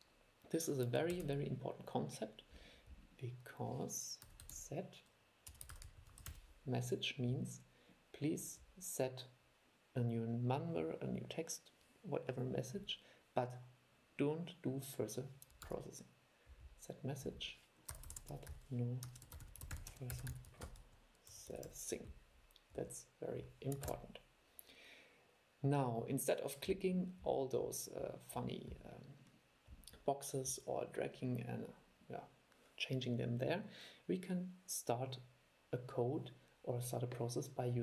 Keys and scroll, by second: 1.3 super+5, 15.8 super+5, 24.0 super+e.